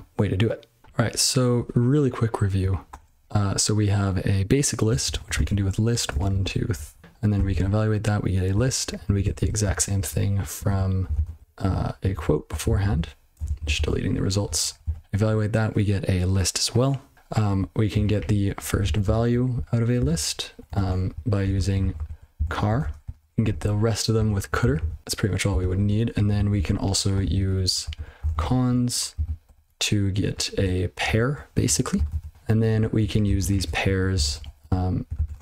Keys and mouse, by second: 2.9 (, 4.6-6.7 typing, 7.0 ctrl+e, 7.5 ctrl+c, 8.5 ctrl+a, 9.0 ctrl+f, 9.2 ctrl+f, 9.4 ctrl+f, 9.6 ctrl+k, 9.9 ctrl+b, 10.6 ctrl+/, 11.1 ctrl+alt+space, 11.3 ctrl+w, 11.4 ctrl+b, 11.6 ', 12.1 ctrl+d, 12.4 ctrl+n, 12.6 ctrl+n, 12.8 ctrl+n, 12.9 ctrl+a, 13.3 ctrl+space, 13.4 ctrl+n, 13.6 ctrl+n, 13.7 ctrl+w, 14.0 ctrl+p, 14.4 ctrl+n, 14.8 ctrl+c, 17.1 ctrl+f, 17.5 ctrl+d, 17.9 ctrl+/, 18.1 ctrl+b, 18.5 ctrl+f, 18.8 ctrl+alt+space, 19.0 ctrl+alt+space, 19.5 ctrl+g, 19.9 ctrl+space, 20.1 ctrl+e, 20.7 (, 21.4 ctrl+a, 21.5 ctrl+f, 21.8 ctrl+f, 21.9 ctrl+f, 22.1-24.2 typing, 23.4 ctrl+f, 24.8 ctrl+c, 25.0 ctrl+b, 25.7 ctrl+d, 26.1 ctrl+f, 26.3 ctrl+f, 26.5 ctrl+f, 27.2 ctrl+b, 27.4-29.4 typing, 27.8 ctrl+f, 29.4 ctrl+b, 29.6 ctrl+BackSpace, 30.5 ctrl+d, 31.0 ctrl+/, 31.6 ctrl+e, 32.1 ctrl+c, 32.3 ctrl+b, 32.5 ctrl+b, 32.7 ctrl+b, 33.0 ctrl+f, 33.2 ctrl+alt+space, 33.5-35.4 typing, 35.1 ctrl+f.